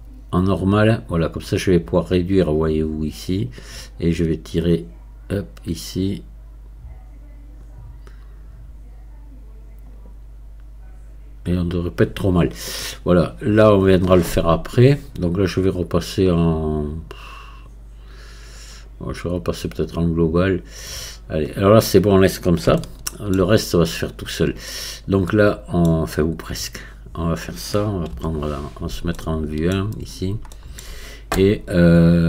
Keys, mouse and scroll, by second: 18.6-22.8 drag, 22.8-24.2 shift+middle drag, 24.2-25.3 scroll up 1, 25.3-26.8 middle drag, 26.8-29.2 drag, 29.2 shift+middle click, 30.1-30.6 scroll up 1, 30.6-32.2 shift+middle drag.